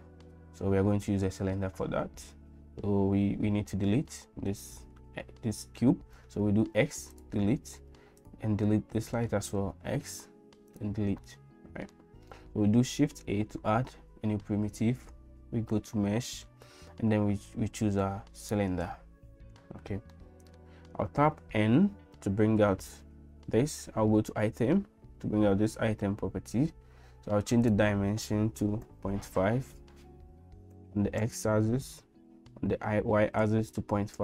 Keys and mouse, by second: 6.6 x, 8.2 click, 9.8 x, 11.2 middle click, 13.1 shift+a, 20.1 middle click, 21.4 n, 27.8-31.8 drag, 32.3-34.2 drag.